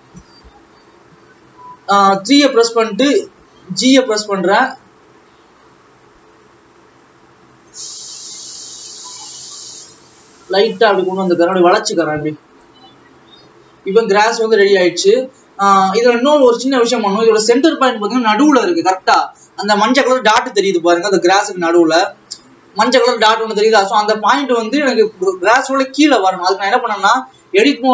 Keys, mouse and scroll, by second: 0.5 KP_3, 1.5-3.4 scroll up 2, 3.8 g, 12.1-12.8 scroll down 3, 12.8-14.9 drag, 14.9 scroll up 2, 15.5-16.1 scroll down 1, 16.1 click, 17.1-17.5 scroll up 2, 22.5 alt+a.